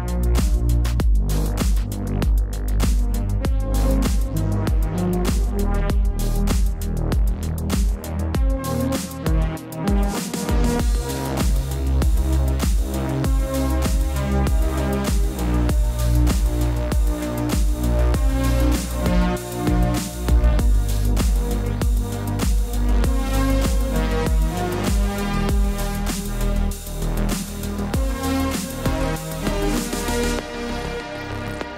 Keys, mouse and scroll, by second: 3.2-3.7 typing, 4.5 click, 6.3 c, 7.1 click, 8.1 v, 8.2 click, 9.8 Escape, 9.9 click, 11.4 ctrl+t, 12.0 click, 12.9 alt+shift+click, 13.3 click, 14.2 Return, 15.4 v, 18.2 scroll up 1, 19.7 click.